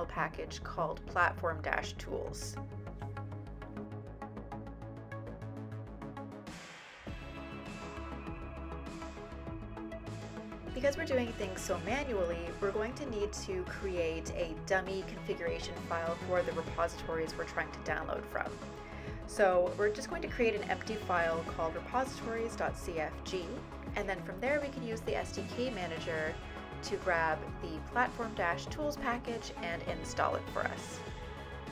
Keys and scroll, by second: 0.0-0.4 typing, 0.6 Return, 3.9-4.6 typing, 6.6 typing, 11.2-13.1 typing, 15.5 typing, 16.8 typing, 17.9 typing, 19.0-27.6 typing, 28.6-29.4 typing, 30.8 typing.